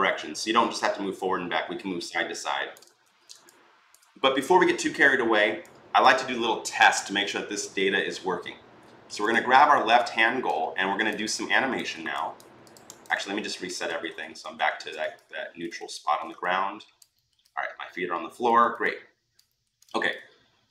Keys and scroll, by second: 2.8 ctrl+z, 13.2 ctrl+z, 13.4 ctrl+z, 13.6 ctrl+z, 13.9 ctrl+z, 14.2 ctrl+z, 15.6 ctrl+z.